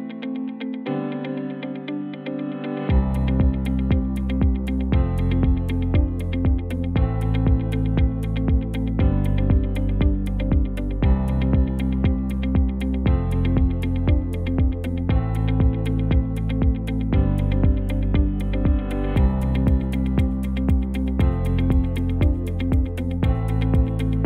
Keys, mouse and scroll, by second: 6.8 alt+shift+z, 10.4 KP_0.